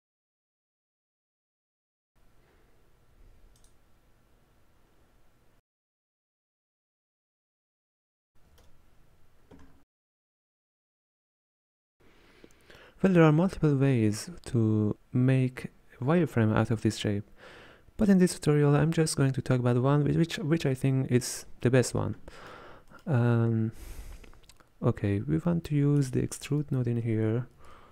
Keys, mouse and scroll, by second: 6.7-7.4 scroll down 2, 7.4-8.5 shift+middle drag, 8.5 a, 10.2 click.